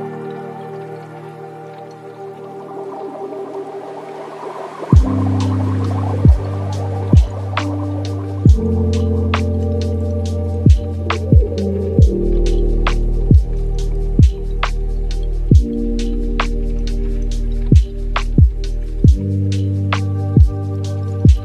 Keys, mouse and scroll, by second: 0.5 click, 1.5 click, 2.2 shift+d, 3.6 ctrl+middle click, 4.6-7.7 drag, 8.0 click, 8.4-11.0 middle drag, 11.0 space, 11.4-12.2 scroll down 11, 12.2-16.0 middle drag, 16.0 click, 19.6 click, 21.0 drag.